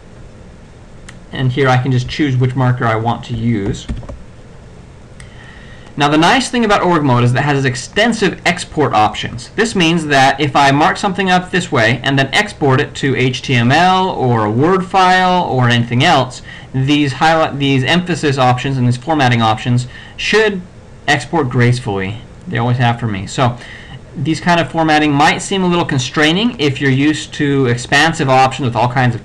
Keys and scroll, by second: 3.9 shift+=.